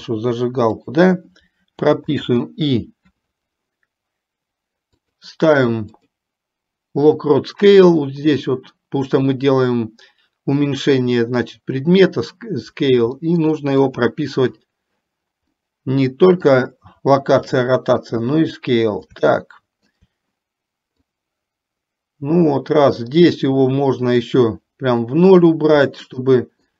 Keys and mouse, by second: 1.3 g, 2.2 i, 5.3-14.6 drag, 15.7-16.7 middle drag, 17.8 shift+middle click, 19.6 shift+middle click, 21.3-25.6 drag, 26.2 shift+middle click.